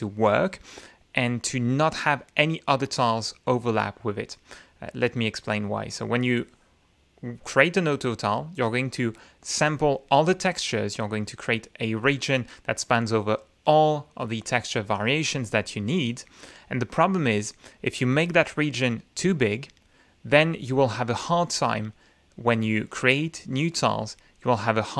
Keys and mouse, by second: 5.9-9.8 drag, 18.1-19.6 drag, 20.4 click, 21.3-22.5 drag, 23.8 click, 24.4 click.